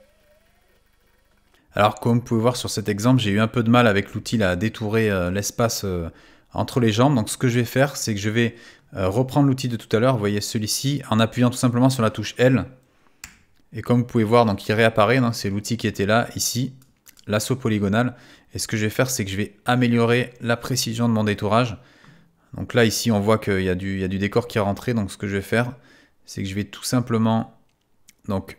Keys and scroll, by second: 13.2 |.